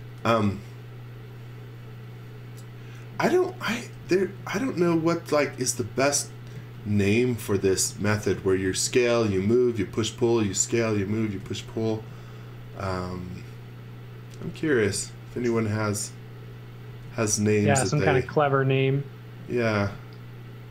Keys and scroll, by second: 0.2 x, 4.0 b, 6.0 space, 6.5 z, 8.3 s, 11.3 space, 12.0 m, 14.6 b, 16.8 space, 17.6 s.